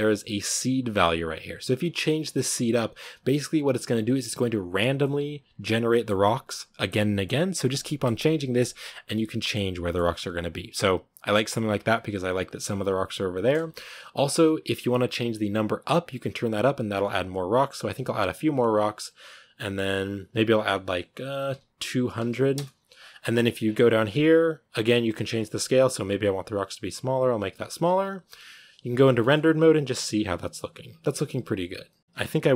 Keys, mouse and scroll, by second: 13.5 a, 15.0-17.9 drag, 22.4 0, 25.2-27.9 shift+drag, 27.9 z, 29.1-32.5 shift+middle drag.